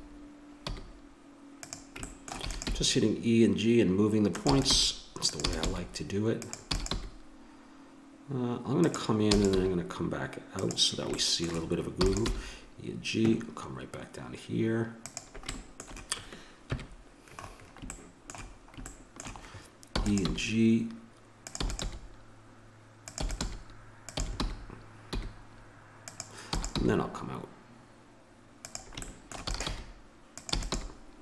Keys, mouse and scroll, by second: 2.0 middle click, 2.4 e, 2.7 g, 4.5 e, 4.9 g, 5.5 e, 5.7 g, 6.7 e, 6.9 g, 9.2 e, 9.6 g, 11.9 e, 12.3 g, 16.6 KP_1, 17.4 middle click, 17.9 click, 18.0 middle click, 19.0-20.6 middle drag, 19.9 e, 20.3 g, 21.6 e, 21.8 g, 23.2 e, 23.4 g, 24.2 e, 26.5 e, 26.8 g, 29.1 click, 29.4 e, 29.7 g, 30.5 e, 30.7 g.